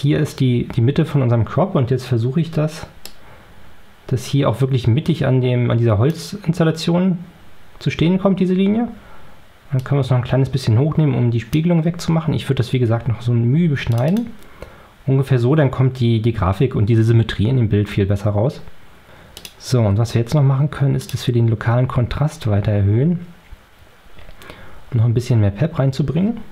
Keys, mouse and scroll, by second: 2.9-6.2 drag, 9.7-11.6 drag, 13.8 click, 19.3 click, 20.9 click, 21.7-22.6 scroll up 4, 24.0-24.3 scroll up 2, 25.6 scroll up 2.